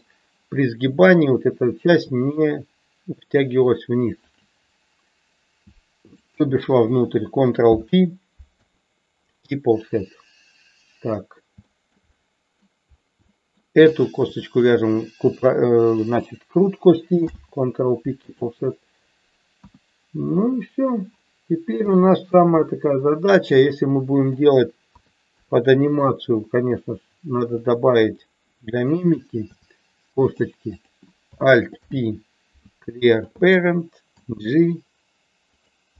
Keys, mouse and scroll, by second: 6.1 shift+click, 7.7 ctrl+p, 11.6 shift+middle click, 12.2 middle click, 13.3 shift+middle click, 14.0 click, 14.7 shift+click, 17.2 ctrl+p, 19.6 KP_1, 21.9 shift+middle click, 23.6 middle click, 24.8 KP_2, 25.3 KP_3, 29.5 e, 30.7 click, 31.8 alt+p, 34.1 g, 35.4 click.